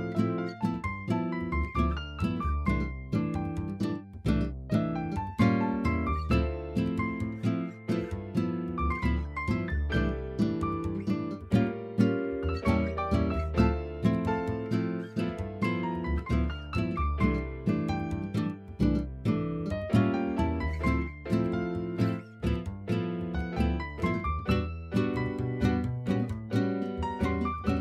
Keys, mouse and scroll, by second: 0.5 middle click, 1.1 shift+middle click, 3.8 click, 6.1 click, 8.4-8.7 shift+middle drag, 18.8 shift+middle click, 19.1-20.2 middle drag, 20.4 shift+middle click, 21.0 click, 21.4-21.9 middle drag, 22.3-22.6 middle drag, 24.0-24.9 middle drag, 25.6 middle click, 26.9-27.2 shift+middle drag.